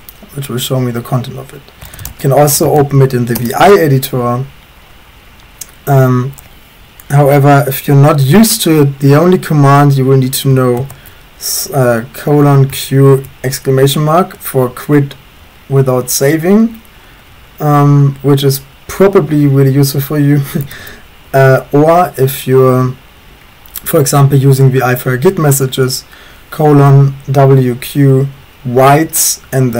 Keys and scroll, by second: 1.6-3.4 typing, 10.6-13.1 typing, 20.7 BackSpace, 20.8 BackSpace, 25.1-26.0 typing.